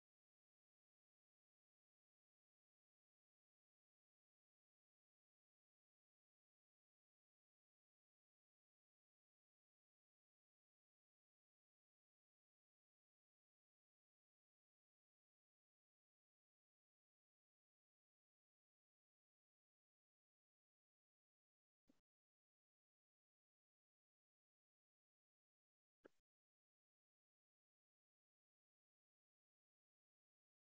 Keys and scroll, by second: 9.9 4, 11.9-13.2 typing, 13.5 Return, 18.0 4.